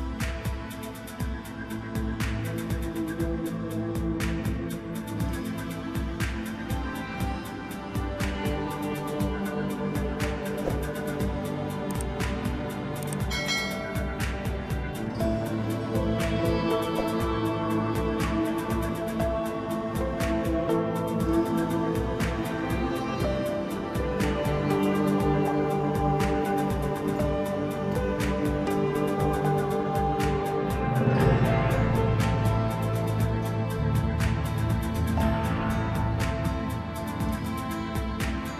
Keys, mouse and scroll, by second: 0.6-2.9 drag, 5.1-7.6 drag, 7.6-8.2 scroll up 2, 8.2 KP_1, 8.8-9.3 scroll up 1, 9.3 Tab, 9.7 3, 10.2 click, 10.6-12.0 middle drag, 12.0 ctrl+i, 12.7 x, 14.0 KP_1, 14.5-15.1 scroll up 1, 15.1 1, 16.2 drag, 17.3 shift+click, 18.1 j, 19.0 click, 20.1 shift+click, 21.0 j, 21.5-22.4 scroll up 1, 22.4 a, 22.7 3, 23.0-24.0 scroll up 1, 24.0 i, 27.9 2, 28.8 click, 29.0 click, 29.7 shift+click, 29.9 shift+click, 31.4 ctrl+b.